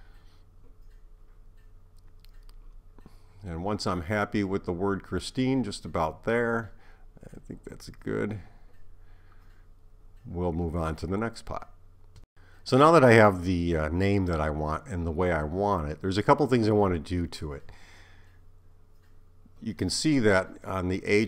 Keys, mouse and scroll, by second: 0.4 click, 6.7 click, 15.2 right click, 16.7 right click, 19.6 click.